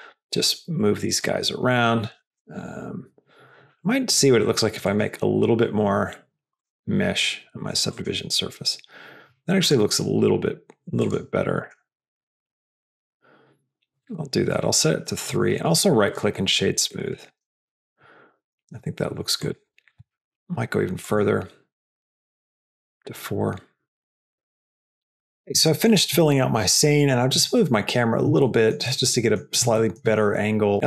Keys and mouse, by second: 0.7 s, 6.4 click, 7.8 click, 11.0 click, 11.6 click, 12.4 click, 15.4-16.7 right drag, 16.9 right click, 19.4 click, 22.1 click, 24.0 click, 24.5-25.6 drag, 28.6 shift+middle click, 29.7 shift+middle click.